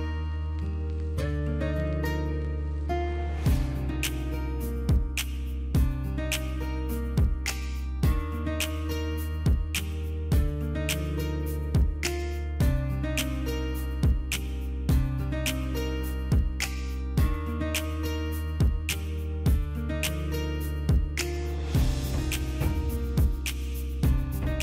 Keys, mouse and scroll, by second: 0.6-2.3 typing, 3.3 ctrl+a, 5.4 ctrl+d, 5.7 ctrl+d, 9.8 double click, 11.2 double click, 12.2 click, 12.4 ctrl+a, 12.8 ctrl+c, 13.5 Right, 13.9 Return, 14.4 ctrl+v, 14.7 Return, 15.0 ctrl+v, 15.4 Return, 15.7 ctrl+v, 15.8 ctrl+v, 16.1 Return, 16.5 ctrl+v, 16.5 ctrl+v, 17.6 ctrl+a, 17.8 ctrl+a.